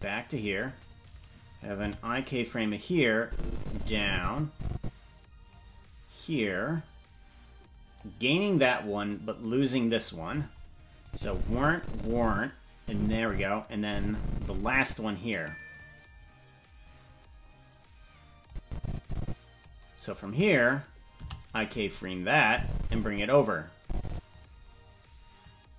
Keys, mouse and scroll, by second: 1.8 i, 3.2-5.5 drag, 6.7-8.0 drag, 9.0 click, 11.0-15.8 drag, 18.4-19.6 drag, 21.2 i, 22.4-24.3 drag, 25.4-25.7 drag.